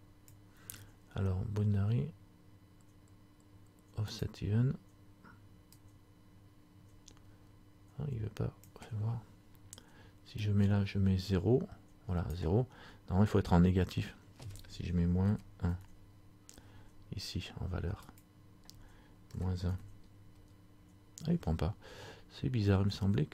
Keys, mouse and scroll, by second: 4.3 click, 10.6 click, 17.1 KP_Subtract, 17.1 KP_1, 18.2 click.